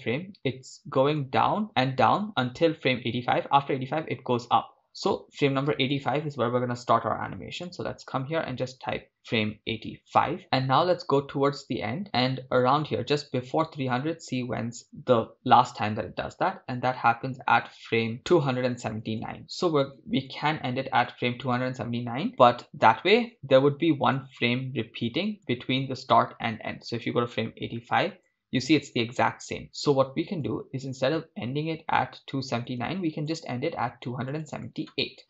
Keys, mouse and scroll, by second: 0.3 Left, 0.4 Left, 0.6 Left, 1.0 Right, 1.7 Right, 2.8 Right, 3.7 Left, 4.1 Right, 4.5 Left, 4.6 Left, 5.0 Right, 8.7-14.8 drag, 11.0 scroll down 3, 15.4 Right, 16.6 Right, 17.2 Left, 17.7 Left, 18.2 Right, 19.1 Right, 19.4 Left, 27.7-28.7 drag, 30.5 click, 34.3-35.2 drag.